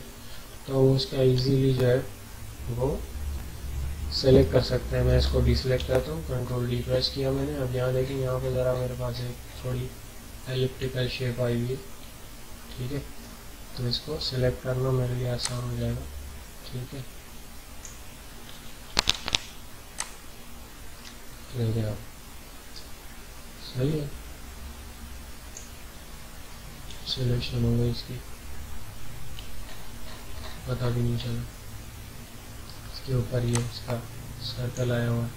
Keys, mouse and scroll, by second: 0.1-2.3 ctrl+scroll down 2, 5.2 ctrl+Num_Lock, 5.2 ctrl+scroll down 1, 5.4 ctrl+d, 6.8 scroll up 1, 7.0 typing, 8.0 alt+scroll up 1, 8.3 typing, 8.7-9.1 alt+scroll up 2, 9.7 ctrl+scroll down 1, 15.4-19.1 drag, 19.1 ctrl+d, 19.9 click, 20.0-27.3 drag, 20.2 typing, 27.3 alt+scroll down 1, 27.8 alt+scroll down 1, 28.0 typing, 28.4 alt+scroll down 1, 29.6 alt+scroll up 1, 30.1 alt+scroll up 1, 30.8 alt+scroll up 1, 32.2 alt+scroll down 1, 33.5-35.3 drag.